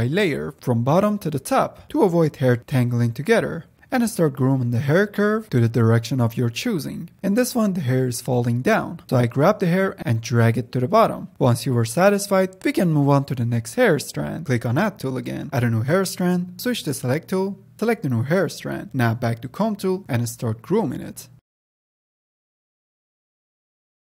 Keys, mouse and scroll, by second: 0.4-1.0 drag, 1.0 ctrl+z, 1.0 f, 1.5-3.2 drag, 3.2-3.8 middle drag, 3.8-4.7 drag, 4.7-5.3 middle drag, 5.3-5.7 drag, 5.7-6.2 middle drag, 6.2-8.0 drag, 8.0-8.6 middle drag, 8.6-10.5 drag, 10.5-12.0 middle drag, 12.0-16.2 drag, 16.2-17.3 middle drag, 17.3-18.1 drag, 18.1 f, 18.2 drag, 18.5-19.6 drag, 19.6 middle click, 19.9 click, 20.3 middle drag, 20.4 click, 20.5 shift+middle click, 20.8 click, 21.2 middle click, 21.4 f, 21.5 middle click, 21.6 click, 22.2 f, 22.2 click, 22.4 middle click, 22.6 scroll up 1, 22.7 click, 23.0 scroll down 2, 23.0-23.6 shift+middle drag, 23.6 click, 23.7 middle drag, 23.9 click, 24.0 middle click.